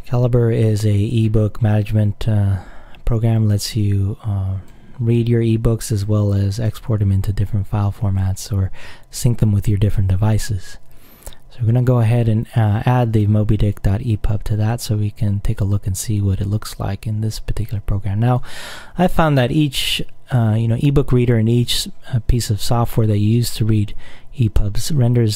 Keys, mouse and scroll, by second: 0.0 click, 3.5-5.3 drag, 6.2 click, 7.8-9.8 drag, 11.9 click, 13.8 click, 14.9 click, 17.8 click.